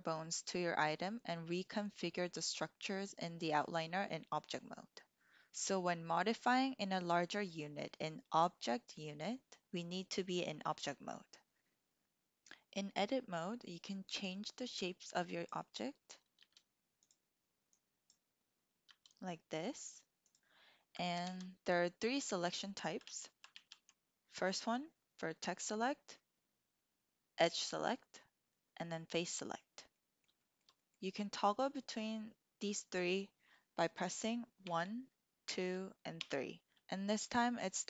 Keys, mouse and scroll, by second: 12.0 ctrl+z, 15.0 click, 16.4 g, 17.0 click, 17.8 click, 18.9 g, 19.7 click, 21.2 ctrl+z, 23.2 ctrl+z, 23.5 ctrl+z, 29.9 click, 30.4 shift+click, 30.8 click, 34.6 1, 35.5 2, 36.0 3.